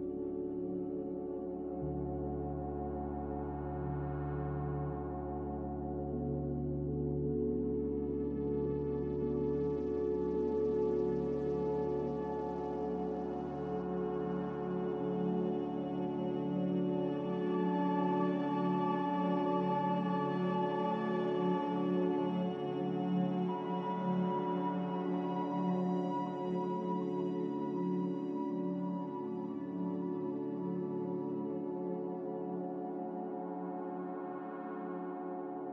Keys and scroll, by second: 10.8 z, 20.0 x, 21.4-23.8 typing, 22.5 Return, 26.1 z.